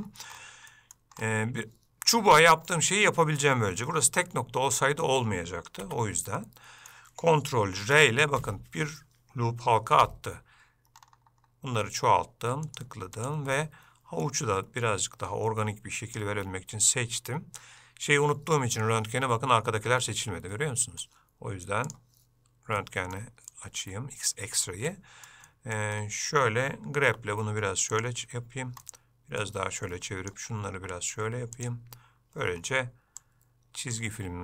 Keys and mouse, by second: 0.9 middle click, 2.8 middle click, 5.9 Tab, 6.5 middle click, 7.9 ctrl+r, 13.7 middle click, 15.2-16.4 drag, 19.0-21.1 middle drag, 22.0 click, 22.9 middle click, 23.6 click, 25.1 middle click, 25.6 middle click, 29.0 middle click, 29.9 click, 32.7 click, 33.3 click.